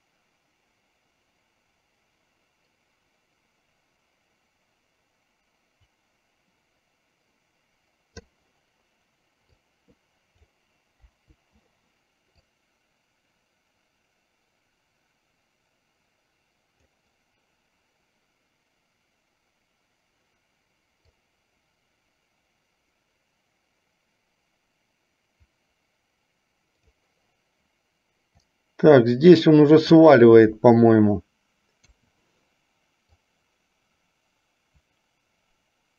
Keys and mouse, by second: 0.0-8.5 drag, 9.6-10.6 drag, 11.1 Delete, 12.6-17.1 drag, 21.4-27.1 drag, 28.4-30.3 drag, 32.0 i, 33.4-35.9 drag.